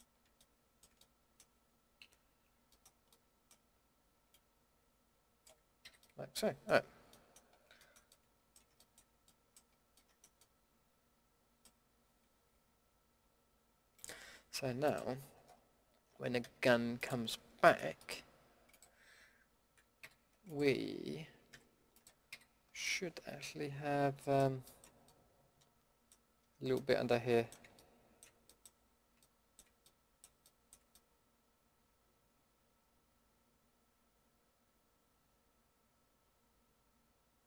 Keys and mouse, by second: 2.0 KP_Decimal, 4.3-5.2 middle drag, 5.8 a, 16.4 g, 19.6 middle drag, 20.0 a, 21.5 g, 22.3 a, 25.5 middle click, 25.8 a, 27.1 middle click, 29.3 middle click, 31.1 middle drag.